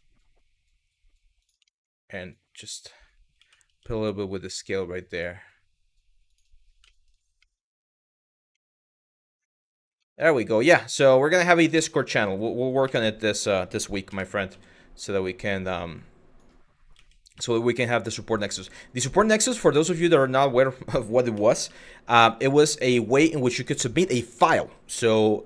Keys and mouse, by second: 1.4 shift+middle click, 2.0 click, 3.0 s, 3.3 y, 5.9 click, 6.6 shift+middle click, 7.0 middle click, 8.3 middle click, 9.6 z, 10.0 click, 10.5 middle click, 11.6 middle click, 12.5 KP_1, 13.7 KP_3, 14.1 z, 15.7 click, 16.6 s, 19.4 click, 19.9 click, 20.9 s, 21.3 y, 22.7 click, 23.2 middle click, 24.0 middle click, 24.7 z.